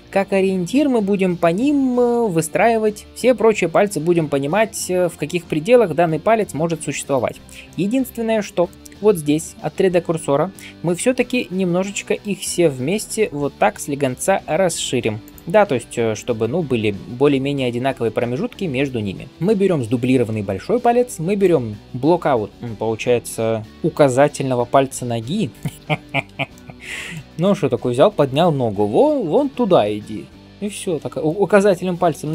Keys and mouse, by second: 7.3-19.3 drag, 19.3-21.2 middle drag, 21.2 shift+click, 21.3-25.8 shift+middle drag, 26.8 ctrl+s, 26.8-30.6 middle drag.